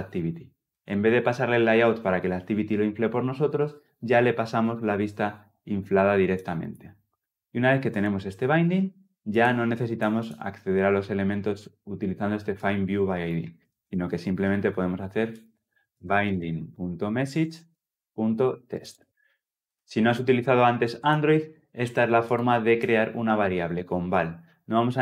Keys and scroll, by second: 19.1 Escape.